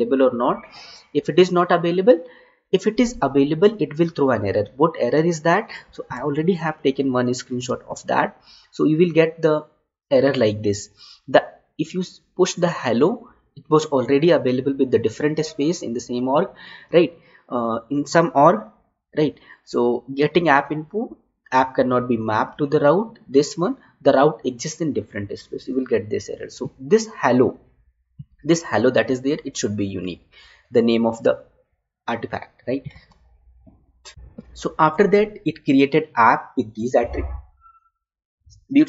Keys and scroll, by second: 6.5 alt+Tab, 7.8 alt+Tab, 33.0 alt+Tab.